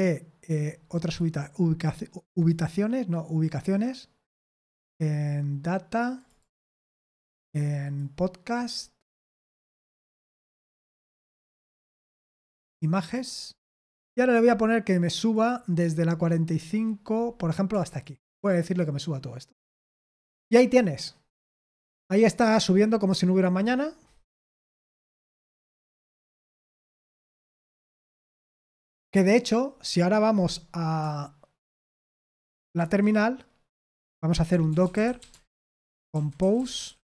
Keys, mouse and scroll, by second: 1.0 click, 2.1 click, 6.1 click, 6.3 click, 7.8 click, 8.0 click, 11.5 click, 13.0 click, 13.2 click, 13.9 scroll down 2, 14.4-15.3 scroll up 3, 15.3 click, 15.7-17.1 scroll down 3, 17.1 scroll up 2, 17.9 shift+click, 19.3 click, 22.6-24.0 scroll down 3, 24.0-24.5 scroll up 1, 28.2-29.1 scroll down 1, 29.1 scroll down 1, 32.7 super+7, 34.2-37.1 typing.